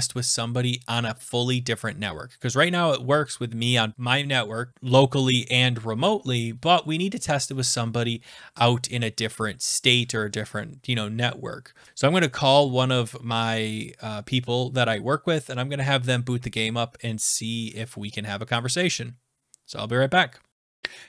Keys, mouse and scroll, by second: 20.5 click.